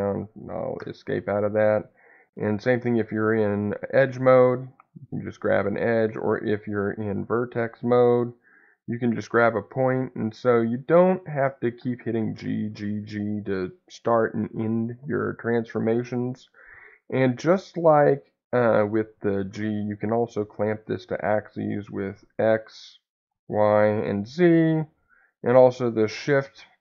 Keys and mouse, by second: 0.0 `, 0.7 Escape, 2.7 2, 3.8-5.7 drag, 5.6 Escape, 7.8 1, 8.2-10.2 drag, 10.2 Escape, 16.7-19.5 drag, 19.5 z, 22.2 x, 23.2 y, 24.2 z, 25.7 shift+z.